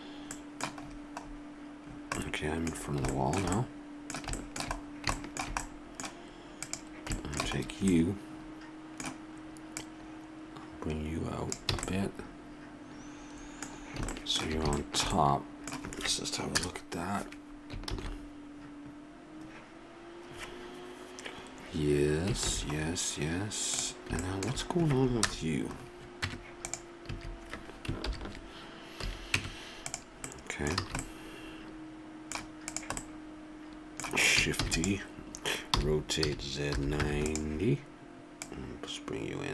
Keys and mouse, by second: 5.7-8.2 middle drag, 8.2-9.2 drag, 9.7-11.7 drag, 11.7 a, 11.9 click, 13.7 middle click, 14.5 middle click, 16.6 KP_0, 18.2 shift+z, 22.8 shift+z, 25.2 KP_0, 26.2 Tab, 27.1 a, 28.0 ctrl+n, 29.0 a, 29.4 Tab, 30.8 a, 33.7 click, 34.6 shift+d, 35.7 r, 38.4-39.5 drag.